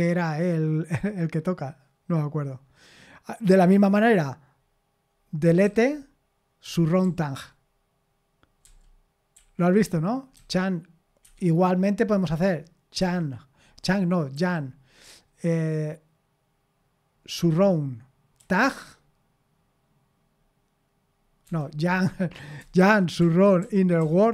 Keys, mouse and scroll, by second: 5.6 d, 6.6-7.0 typing, 8.6 j, 9.4 k, 10.3 c, 11.2 Escape, 13.0 c, 13.8 Escape, 14.3 y, 17.3 s, 18.4 t, 21.4 Escape, 22.6-24.3 typing.